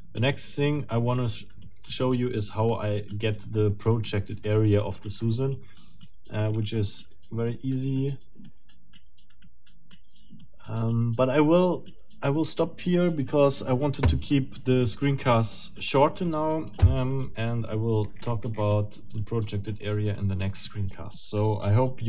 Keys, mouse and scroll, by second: 0.2-1.5 middle drag, 2.0 middle click, 3.0 middle click, 3.4 middle click, 4.5 middle click, 6.5 click.